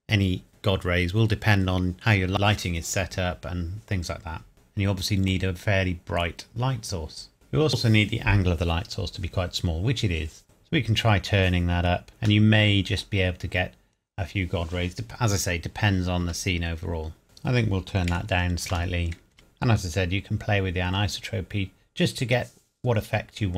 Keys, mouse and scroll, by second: 4.5 middle click, 6.2-6.6 scroll up 1, 10.4 click, 12.4 scroll up 1, 16.4 KP_0, 17.2 click, 18.1 KP_Decimal, 18.6 KP_0, 19.3 click.